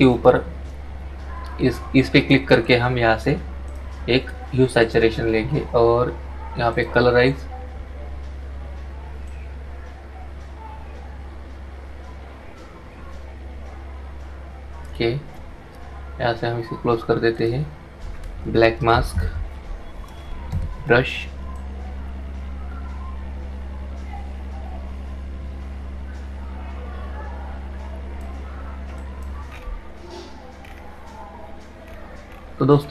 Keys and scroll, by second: 19.6 ctrl+i.